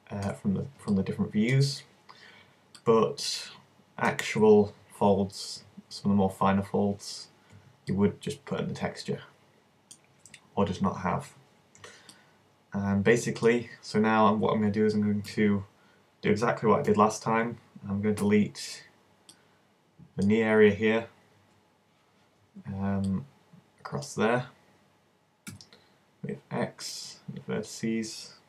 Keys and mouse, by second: 0.9-8.0 middle drag, 11.1-12.1 drag, 11.1-12.1 right drag, 15.3 z, 16.9 KP_1, 18.2 b, 21.4 v, 22.4 c, 25.5 x.